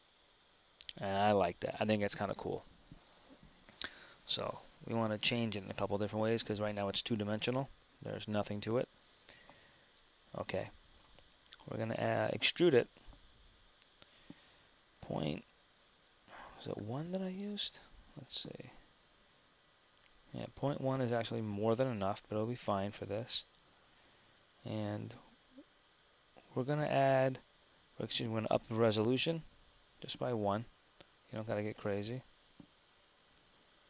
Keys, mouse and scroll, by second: 21.8 KP_1.